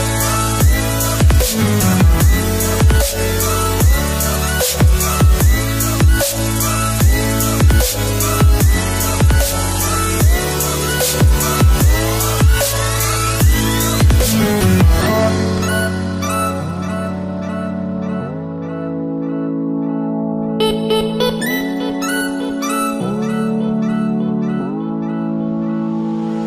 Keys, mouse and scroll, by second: 2.6-3.4 alt+scroll up 2, 3.7 shift+click, 4.0-8.1 shift+drag, 10.0 alt+scroll up 1, 11.3 click, 12.4 shift+click, 15.1-15.5 alt+scroll down 1, 16.4-19.9 drag, 24.0 alt+scroll down 1, 24.9 space, 25.5-26.2 alt+scroll up 1.